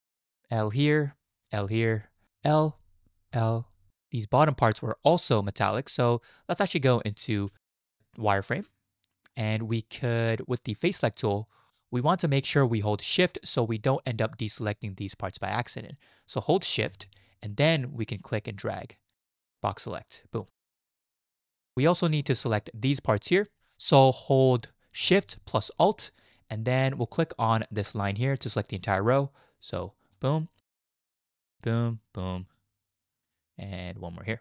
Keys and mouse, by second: 0.6 l, 1.5 l, 2.3 l, 3.3 l, 7.5 z, 18.2-20.1 shift+drag, 20.7 shift+drag, 21.2 shift+click, 21.6 shift+click, 22.4 shift+drag, 32.1 alt+shift+click, 32.8 shift+drag.